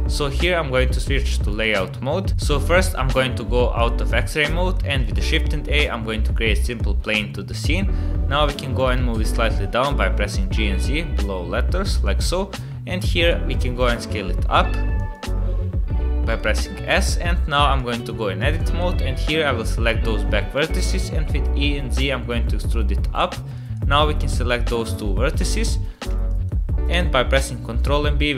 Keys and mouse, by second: 3.8 middle click, 5.1 shift+a, 7.6 KP_1, 8.6 g, 13.0 middle click, 13.8 s, 15.5 s, 16.9 Tab, 17.8 click, 18.6 shift+click, 20.6 e, 23.6 click, 24.3 ctrl+click, 25.4 ctrl+click, 26.3 shift+click, 27.5 ctrl+b.